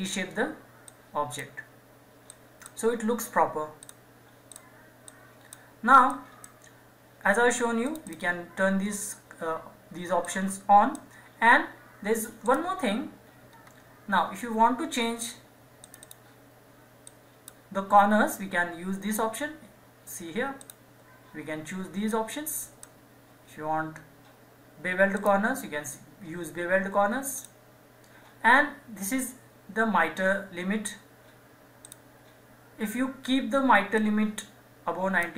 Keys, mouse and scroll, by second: 13.5 scroll up 1, 15.8-18.9 drag, 20.6-23.8 drag, 25.1 click, 31.8 click.